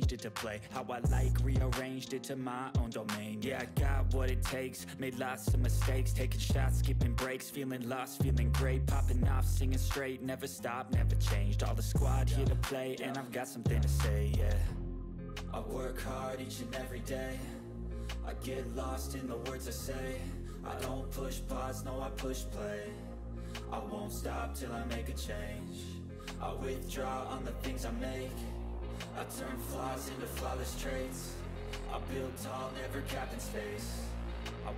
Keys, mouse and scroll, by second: 0.8-2.2 typing, 2.4 click, 3.0 ctrl+middle click, 3.9-7.0 drag, 8.4-9.4 click, 9.9-14.8 typing, 14.6 click, 14.9-15.7 scroll down 1, 15.8 scroll down 1, 17.2-17.9 scroll up 1, 17.9-21.0 drag, 25.7-26.9 click, 27.7 ctrl+d, 27.8-28.3 click, 29.3 click, 30.6-31.2 click, 31.7-33.2 typing, 33.2 ctrl+a, 33.7 click.